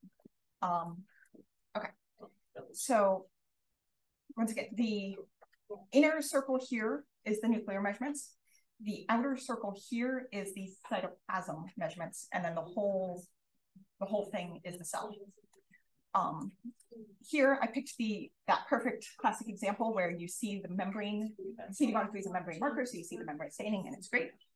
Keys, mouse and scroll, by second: 0.0-1.1 scroll up 1, 1.1-1.5 drag, 1.5-2.3 scroll up 1, 2.3 click, 2.7-4.6 scroll up 1, 4.6 click, 4.7-5.8 scroll up 2, 4.7 click, 5.8-10.9 scroll up 1, 10.9-14.1 scroll up 1, 14.1-15.0 scroll up 1, 15.0 scroll up 1, 15.1-15.5 scroll down 1, 15.5-16.7 scroll up 2, 16.0-16.5 drag, 17.3 drag, 17.5 scroll up 2, 17.8 d, 18.4 d, 18.9 d, 19.3 d, 19.7 click, 19.9-21.1 scroll up 2.